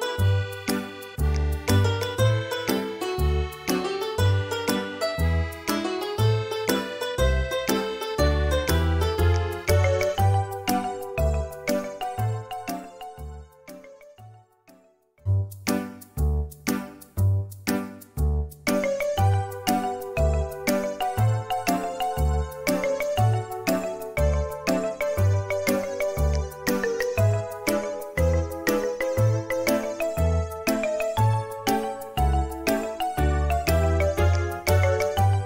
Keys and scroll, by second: 7.6 ctrl+z, 13.6 space, 19.8 typing, 21.5 Return, 26.0 space, 27.5 typing, 29.8 space, 35.0 4.